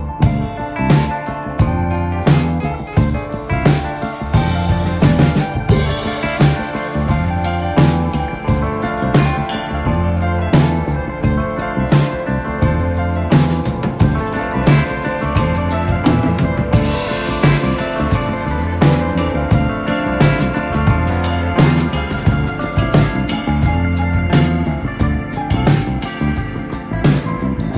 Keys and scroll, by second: 1.0 ctrl+space, 6.8 ctrl+space, 9.6 space, 12.3 ctrl+z, 14.0 1, 14.5 space, 16.1 ctrl+z, 18.9 r, 19.8 ctrl+z, 20.9 Escape, 21.0 space, 21.5 r, 23.3 Escape, 23.6-24.8 typing, 26.4 Escape, 27.6 r.